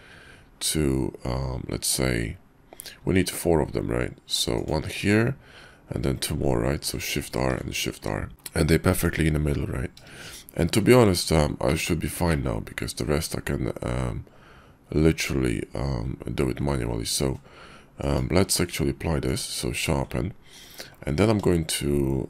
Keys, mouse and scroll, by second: 7.0 shift+r, 7.6 shift+r, 8.5 KP_5, 8.9 Tab, 10.9 shift+2, 11.7 click, 12.3-16.6 drag, 18.4 q.